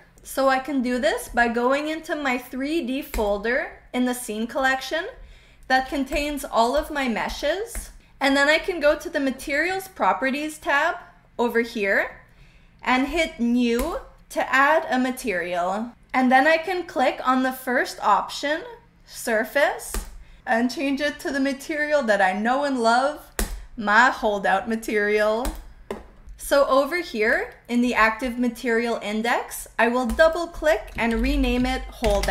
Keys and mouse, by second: 3.0 click, 6.0 click, 6.7 click, 7.3 click, 7.7 drag, 13.7 click, 19.8-23.6 drag, 25.4 drag, 30.0 click, 30.2-32.3 drag, 32.0 BackSpace.